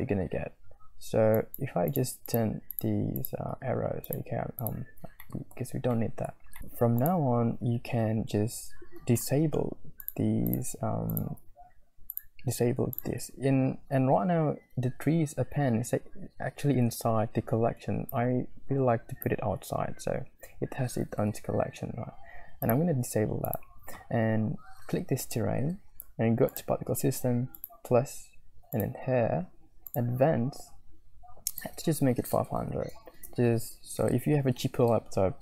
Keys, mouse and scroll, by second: 1.3 click, 1.9 click, 2.2 click, 2.7 click, 3.1 middle click, 3.1 scroll down 1, 4.0 click, 4.1-4.6 middle drag, 4.1-4.6 scroll down 1, 4.6 click, 5.4 middle click, 5.9 click, 6.0 middle click, 6.3 scroll down 1, 10.0 click, 11.1 click, 12.1 click, 12.9 click, 18.1 click, 22.6 click, 23.5-27.2 drag, 27.9 click, 30.0-33.6 drag, 33.2 0.